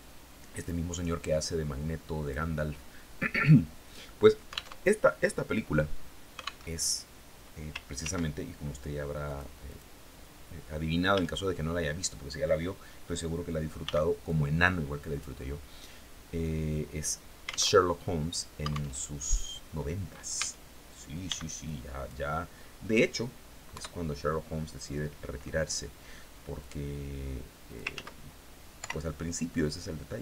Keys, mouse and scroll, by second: 0.8-1.9 drag, 4.2 alt+Tab, 6.1 alt+Tab, 7.4 ctrl+r, 8.0 ctrl+scroll up 3, 8.7 click, 9.1 click, 10.5 a, 13.2 b, 13.7-14.8 drag, 17.2 alt+Tab, 18.4 alt+Tab, 19.8 a, 20.7 b, 21.1 click, 21.8 middle click, 23.2 KP_3, 26.0-27.4 drag, 27.3 ctrl+z, 28.2 o, 28.9-30.2 drag.